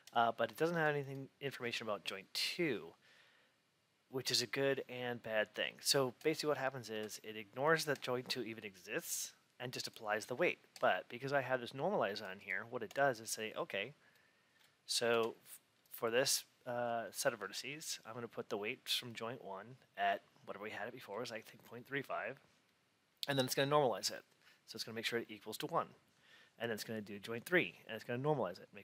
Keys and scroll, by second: 6.8 F8, 15.0 F8.